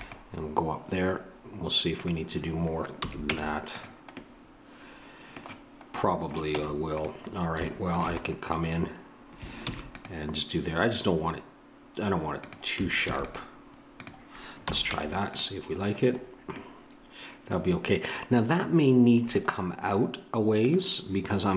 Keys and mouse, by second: 3.0 a, 3.3 Tab, 9.6 ctrl+r, 13.0 ctrl+r, 14.6 a, 14.9 Tab.